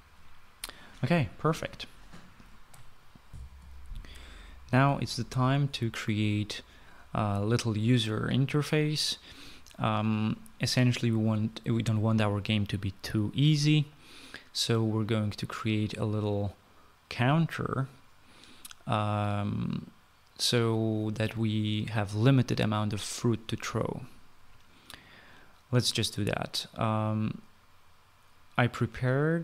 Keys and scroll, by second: 4.2 shift+F9, 4.3 shift+F9.